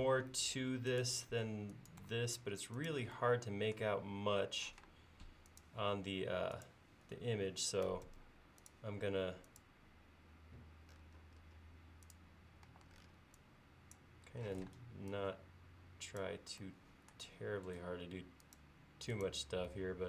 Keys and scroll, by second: 0.1 Left, 0.6 Right, 4.8 r, 8.1 a, 12.7 e, 14.6 p, 17.9 l.